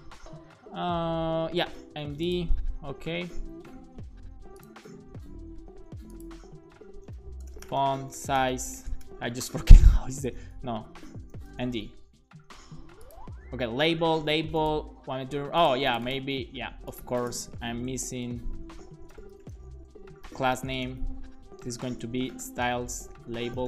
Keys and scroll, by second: 7.2-8.8 typing, 9.4 super+s, 9.8 Right, 10.0 Right, 10.3 Left, 11.1 BackSpace, 11.6 m, 11.8 super+s, 18.2 Left, 18.6 c, 19.0 BackSpace, 19.1 space, 20.3-23.6 typing.